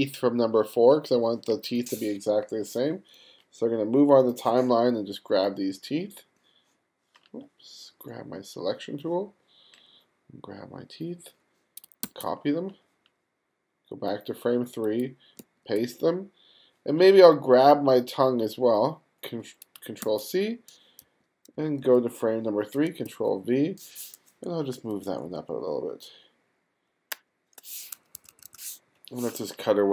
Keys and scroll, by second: 12.1 super+c, 15.4 super+v, 20.0 super+c, 21.0 g, 21.6 f, 23.1 super+v, 24.8 shift+Up, 27.2 shift+Left, 28.2 2.